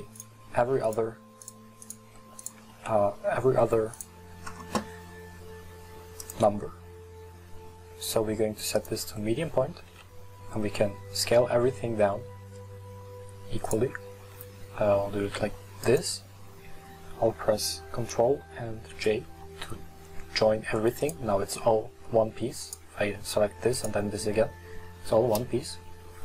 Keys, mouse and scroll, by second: 0.2 shift+right drag, 0.9 shift+right click, 1.5 shift+right drag, 1.9 shift+right drag, 2.5 shift+Right, 2.8 s, 6.3-9.4 drag, 10.0 s, 14.2 s, 19.0 ctrl+j, 21.1-22.1 right drag, 22.1 middle drag, 22.7 right drag, 23.8 right click, 25.4 KP_1.